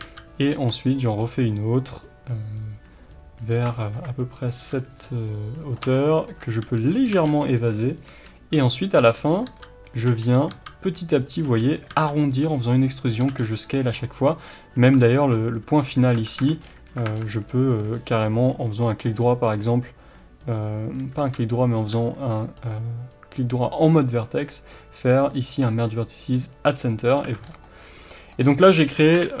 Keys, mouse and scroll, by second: 0.0 s, 0.4 click, 0.5 e, 3.5 click, 3.7-5.7 shift+middle drag, 4.5 s, 5.7 click, 5.9-6.9 shift+middle drag, 6.6 s, 6.9 click, 7.0 g, 7.8 click, 8.1-11.9 typing, 8.8 click, 9.4 click, 10.0 click, 10.3 click, 11.2 click, 11.7 click, 12.7 click, 13.2 g, 13.8 click, 14.0-17.8 middle drag, 15.6 Tab, 16.6 scroll down 1, 17.0 Tab, 17.1-17.4 scroll up 1, 17.8-27.6 right drag, 21.1 1, 21.8 w, 27.1-27.6 scroll down 4, 27.2 Tab, 27.6-29.4 middle drag, 28.4-28.8 scroll up 2, 28.8 Tab, 29.1 KP_1.